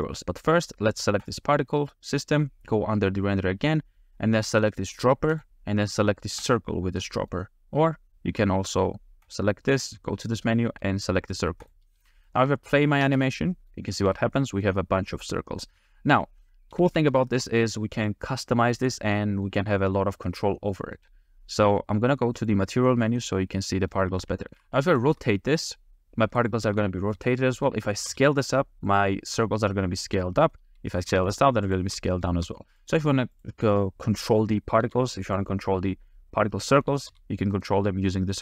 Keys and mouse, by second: 5.3 click, 7.1 middle click, 9.3-11.7 drag, 12.3 shift+middle click, 13.1 space, 13.5 middle drag, 13.8-14.1 shift+middle drag, 14.5 middle click, 15.7-16.2 shift+middle drag, 16.7 a, 16.9 a, 17.2 shift+middle click, 18.0 click, 18.3 g, 18.9 click, 19.2-19.5 middle drag, 20.5-21.0 middle drag, 22.4 click, 23.2-23.6 drag, 23.6 middle click, 24.5 shift+click, 25.1 r, 26.4 click, 26.6 g, 27.1-28.1 drag, 28.1 s, 28.9 drag, 29.5 middle click, 31.0 s, 31.7 click, 32.2 click, 32.3 r, 32.8 click, 32.9 g, 33.3 click, 33.5 r, 33.7 r, 34.1 click, 34.8 s, 36.1-36.9 drag, 37.1 s, 38.1 click.